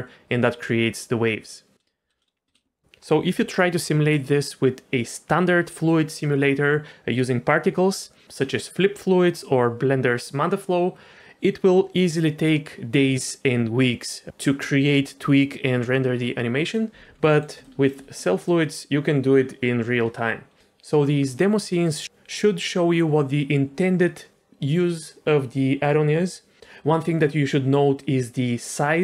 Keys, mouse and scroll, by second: 2.5 space, 17.3 middle click, 17.6 shift+middle click, 18.2 middle click.